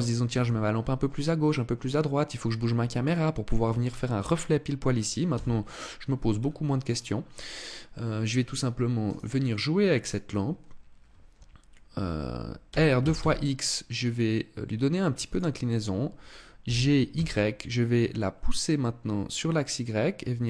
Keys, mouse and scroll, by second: 5.0 KP_0, 5.8 scroll down 3, 6.5 scroll up 1, 7.9 scroll down 1, 8.7 right click, 9.7 right click, 12.3 r, 15.0 click, 16.3 g.